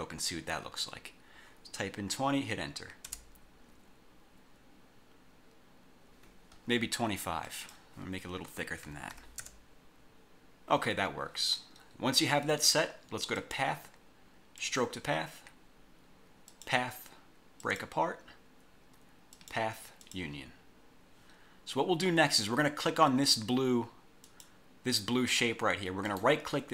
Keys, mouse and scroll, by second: 3.2 Return, 7.6 click, 8.9 2, 9.3 5, 9.5 Return, 13.5 click, 14.7 click, 16.6 click, 17.7 click, 19.5 click, 20.1 click, 24.4 click, 26.2 right click.